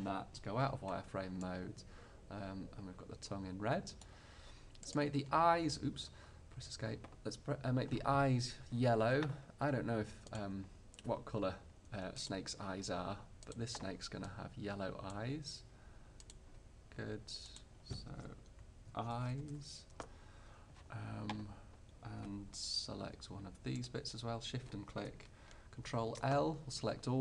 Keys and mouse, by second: 0.7 z, 5.0-6.8 drag, 6.8 middle click, 10.4-14.8 drag, 15.3 click, 17.6-19.4 drag, 23.9-25.8 middle drag, 25.9 ctrl+l.